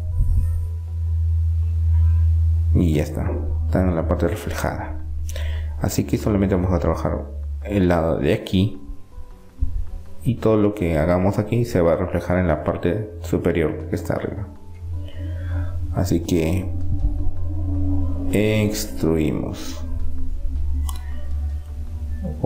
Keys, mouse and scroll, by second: 0.8 middle click, 2.2-4.4 middle drag, 5.1 Tab, 5.2 middle click, 6.8 KP_7, 7.4 middle click, 9.8 click, 10.3-13.8 right drag, 13.8 click, 14.5-16.0 middle drag, 19.3-20.8 drag, 22.1-22.4 middle drag.